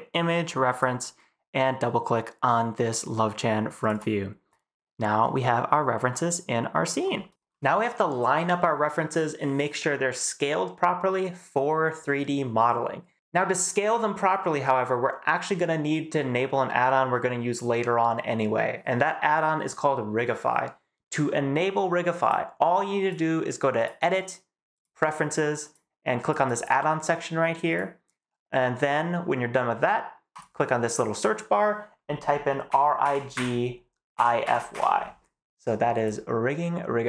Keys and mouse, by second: 5.2-6.8 middle drag, 23.7-24.8 middle drag.